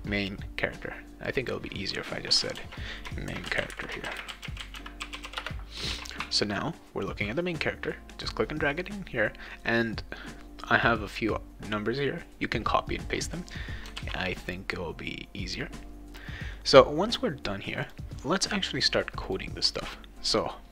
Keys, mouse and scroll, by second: 1.3 click, 2.5 ctrl+a, 3.0-5.9 typing, 14.0 ctrl+s, 17.8 click, 19.3 click, 19.7 click.